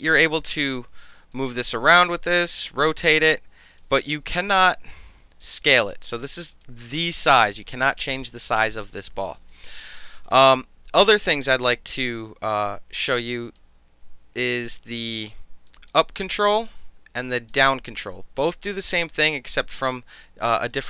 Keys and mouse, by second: 0.0 alt+click, 0.2-1.3 alt+middle drag, 0.7 alt+w, 1.3-2.1 drag, 2.2 ctrl+z, 2.8 e, 3.1 click, 4.0 ctrl+z, 4.7 r, 5.7 drag, 6.5 click, 10.2-10.5 drag, 11.3 click, 11.3-13.1 middle drag, 13.1-13.5 alt+drag, 13.5-14.7 alt+middle drag, 14.7-15.1 alt+drag, 15.1-15.7 alt+middle drag, 15.7 drag, 17.4 click, 19.4 click, 19.8 alt+click, 20.7 alt+click.